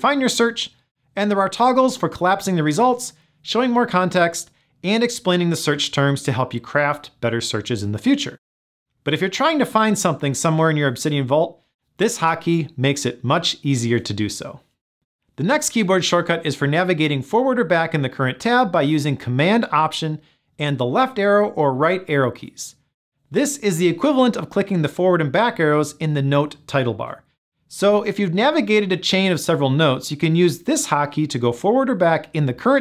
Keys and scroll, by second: 28.1 alt+super+Left, 32.5 alt+super+Right.